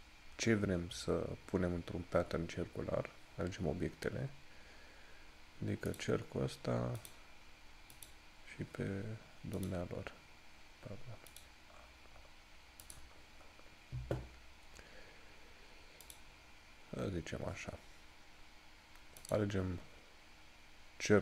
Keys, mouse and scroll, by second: 6.1 click, 11.9 scroll up 1, 16.2 click, 17.2 scroll down 1, 19.5 click.